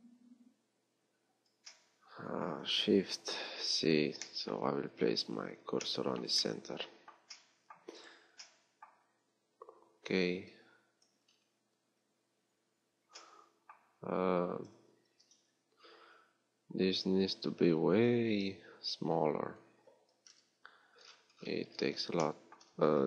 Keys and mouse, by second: 3.2 shift+c, 15.1 s, 20.2 KP_3, 22.8 z.